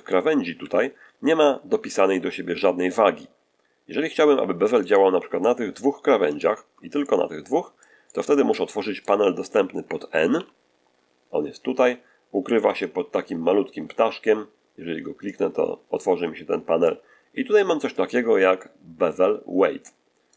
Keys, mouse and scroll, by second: 0.5 2, 4.8 right click, 6.2 shift+right click, 6.9-7.9 shift+middle drag, 10.2 n, 12.5 n, 15.2 click, 16.8-18.0 drag, 18.5-20.3 ctrl+middle drag.